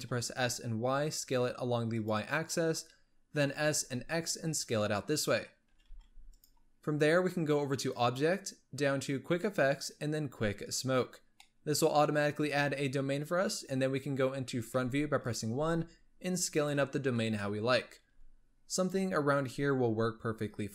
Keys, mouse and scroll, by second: 3.2 s, 5.6 s, 7.6-10.6 drag, 11.3-13.1 middle drag, 13.1 KP_1, 14.4 s, 15.3 g, 16.9-17.3 scroll up 1, 17.3-17.9 shift+middle drag, 17.9 s.